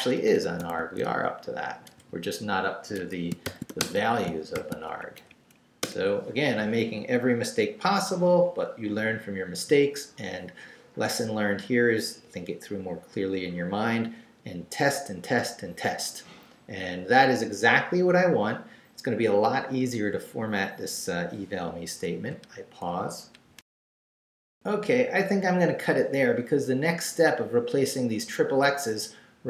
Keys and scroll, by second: 0.0-2.0 typing, 3.0 Escape, 3.2-4.5 typing, 5.0 shift+Up, 5.8 Return, 23.6 alt+shift+super+z.